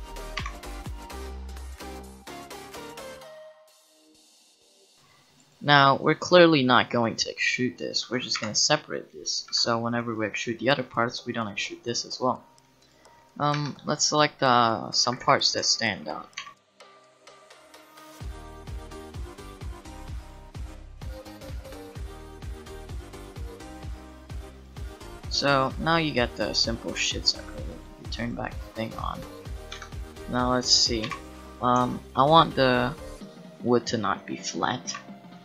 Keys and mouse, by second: 0.4 KP_7, 1.3 a, 1.6 c, 8.4 p, 9.5 Tab, 10.3 middle click, 10.3 click, 13.5 Tab, 15.0 a, 15.2 a, 16.4 KP_7, 17.3 c, 17.9 c, 18.2 click, 19.3 click, 19.5 Tab, 19.6 Tab, 20.1-24.4 typing, 20.3 click, 21.1 click, 22.2 Tab, 22.4 Tab, 22.9 shift+click, 23.4 Tab, 23.6 Tab, 23.9 Tab, 24.0 Tab, 25.2 Tab, 28.8 middle click, 29.2-30.5 drag, 29.7 Tab, 31.0 KP_7.